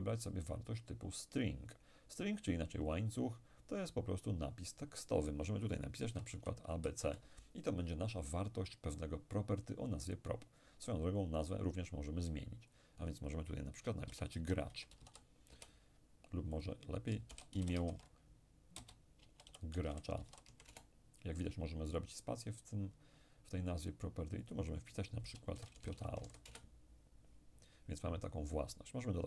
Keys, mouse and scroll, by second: 2.9 click, 4.8 click, 6.1 a, 6.4 b, 6.9 c, 7.1 Return, 12.8 click, 14.1-15.5 typing, 15.5 Return, 16.6 shift+click, 17.3 i, 17.6 m, 17.9 alt+shift+e, 18.8-20.5 typing, 20.7 Return, 24.5 click, 25.6-26.5 typing, 26.5 Return.